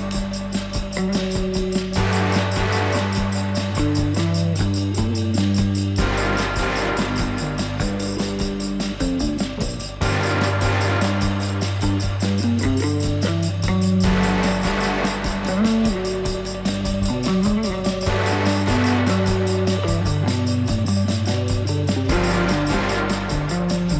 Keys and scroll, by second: 8.1 F4, 9.2 alt+x, 11.3 F4.